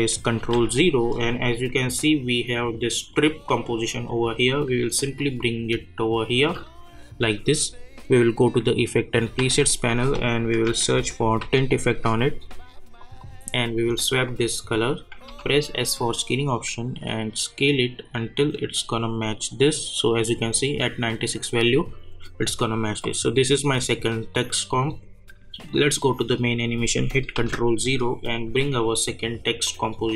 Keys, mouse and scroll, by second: 0.3 ctrl+0, 3.1-7.6 drag, 8.2 click, 9.4 ctrl+a, 10.4-11.9 typing, 13.0 click, 15.2 s, 16.0-19.4 drag, 25.7 click, 27.3 ctrl+0, 29.6-30.1 drag.